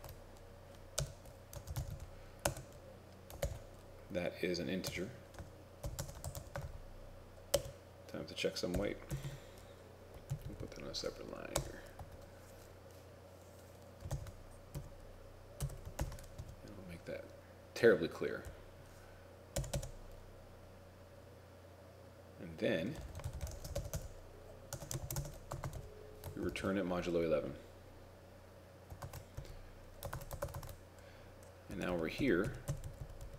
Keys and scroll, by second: 0.0 ctrl+Tab, 3.5 ctrl+j, 5.9 shift+8, 6.0 shift+space, 10.4 ctrl+Right, 10.5 ctrl+Right, 14.3 shift+9, 16.1 shift+0, 25.1 shift+5, 26.5 ctrl+shift+s, 29.2 ctrl+Tab, 30.2 ctrl+Tab, 30.5 ctrl+Tab.